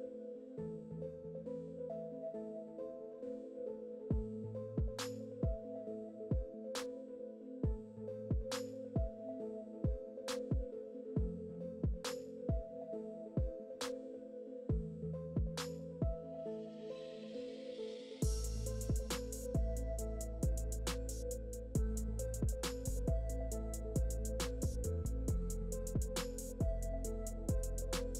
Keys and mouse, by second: 0.2-2.1 typing, 2.8 ctrl+KP_1, 2.8 ctrl+KP_3, 3.0 shift+Tab, 3.2-7.3 typing, 3.9 click, 6.8 click, 7.1 Tab, 8.1 ctrl+KP_1, 8.1 ctrl+KP_3, 8.1 Tab, 8.3-21.6 typing, 8.6 ctrl+z, 8.8 click, 10.2 click, 11.2 middle click, 11.7 Tab, 11.7 Tab, 12.7 click, 13.2 click, 13.7 click, 14.1 click, 14.5 click, 14.9 click, 15.1 click, 16.1 click, 16.3 click, 16.9 click, 17.2 click, 17.5 click, 17.7 click, 18.0 click, 18.4 click, 19.0 Tab, 20.1 ctrl+KP_1, 20.7 ctrl+KP_3, 20.7 click, 20.9 Tab, 21.0 Tab, 21.6 ctrl+r, 21.6 Tab, 22.6 Tab, 22.7 g, 23.0 s, 24.0 g, 24.7 g, 25.8 ctrl+r, 27.2 ctrl+r.